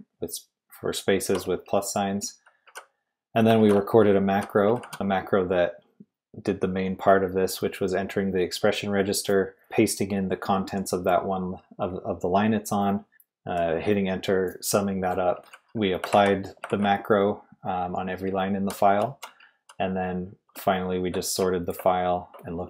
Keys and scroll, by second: 1.2-5.4 typing, 15.1-16.7 typing, 18.0-22.3 typing.